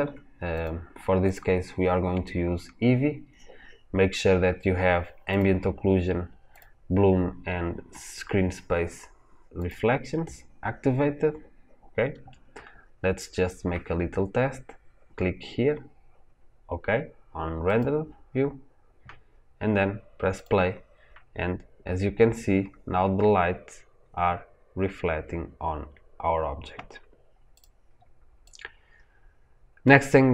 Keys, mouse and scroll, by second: 5.2 click, 6.4 click, 9.5 click, 17.6 click, 20.3 click, 27.4 click, 28.4-30.3 drag.